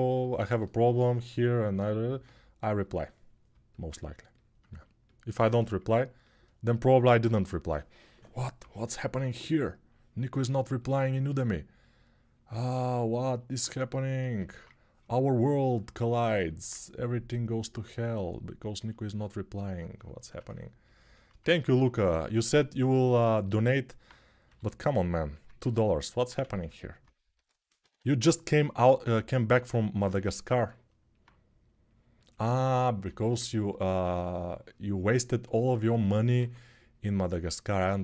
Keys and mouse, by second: 0.0-6.0 alt+right drag, 6.0-33.1 ctrl+alt+drag, 7.1 1, 8.4 [, 8.9 [, 8.9 [, 24.2 g, 25.2 ctrl+z, 26.2 ctrl+z, 27.1 g, 27.6 ], 27.7 ], 36.2 2, 37.8-38.0 drag.